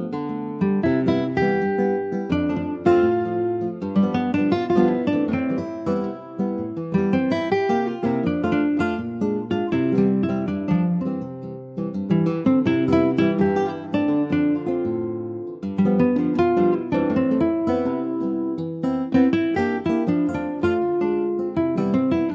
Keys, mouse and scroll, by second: 0.3 click, 0.7-2.8 middle drag, 2.8 click, 3.3 middle click, 4.2 click, 8.1 click, 8.6 middle click, 9.2 scroll up 1, 9.3 click, 9.6-11.6 middle drag, 11.6 scroll up 1, 11.8 click, 12.4 click, 12.8 shift+click, 14.0 ctrl+j, 14.3 click, 14.7-17.4 middle drag, 17.4 click, 17.6 scroll down 3, 17.8 middle click, 18.7 ctrl+z, 19.1 ctrl+z, 20.8 click, 21.3 Delete, 21.6 click.